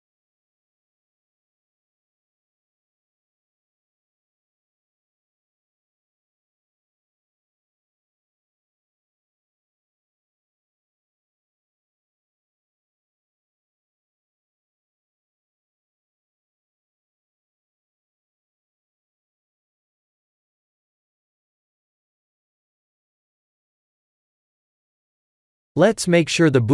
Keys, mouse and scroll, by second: 3.5 click, 4.1 shift+z, 4.9 KP_1, 5.7 g, 10.1 click, 10.8 click, 11.2 shift+click, 13.4 click, 14.1 click, 15.8 shift+click, 16.3 shift+click, 17.0 ctrl+j, 17.6 click, 18.3 click, 19.9-20.5 scroll down 5, 21.4 scroll down 2, 21.5 click, 24.3-24.6 scroll up 2, 25.0 shift+middle click, 25.6-26.7 scroll up 6.